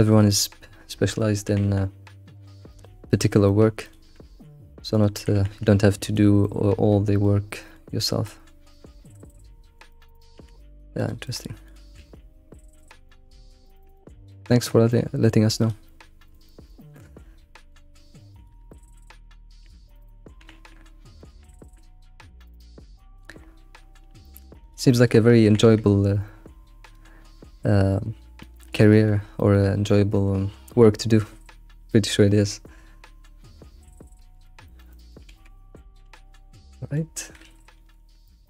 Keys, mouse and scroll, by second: 0.1 click, 1.4 g, 3.5 shift+middle click, 3.8 click, 4.1 g, 5.1 g, 6.4-8.0 middle drag, 8.0 click, 8.2-8.9 middle drag, 8.9 scroll down 2, 9.3-10.3 middle drag, 10.3 alt+s, 10.4 alt+s, 11.2-11.7 middle drag, 11.7 click, 11.9 alt+s, 13.1-15.6 middle drag, 15.6 click, 15.9-18.3 middle drag, 18.3 ctrl+click, 18.7 middle click, 19.4 scroll down 2, 19.6 middle click, 20.4 g, 20.4 g, 21.4 g, 21.4 g, 22.6 middle click, 23.4-24.2 scroll up 4, 24.2 shift+middle click, 24.6 click, 24.9 middle click, 25.4 g, 25.5 g, 27.9-28.4 scroll down 3, 28.4-31.3 shift+middle drag, 31.3 scroll down 2, 31.9-35.3 middle drag, 35.3 alt+x, 35.6 scroll down 1, 35.8 middle click, 36.0 alt+x, 36.5 scroll up 1, 36.7-37.7 middle drag, 37.7 ctrl+s, 38.2 middle click.